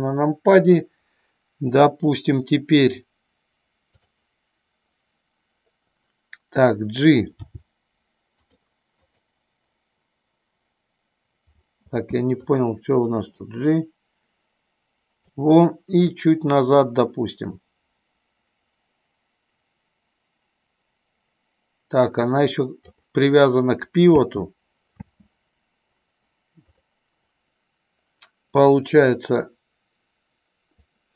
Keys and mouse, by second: 4.0 click, 7.5 g, 9.1 click, 12.1 space, 12.4 click, 13.6-15.4 drag, 16.2-22.9 drag, 24.1 space, 26.8 click, 29.1-31.0 drag.